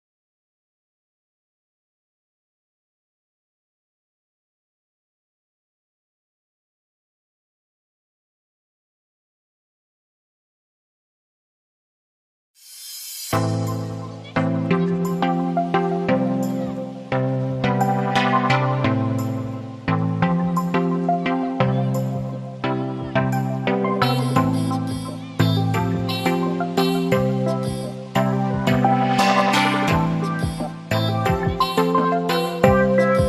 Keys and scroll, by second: 0.2 ctrl+Left, 29.4 ctrl+=, 31.2 space, 33.0 [.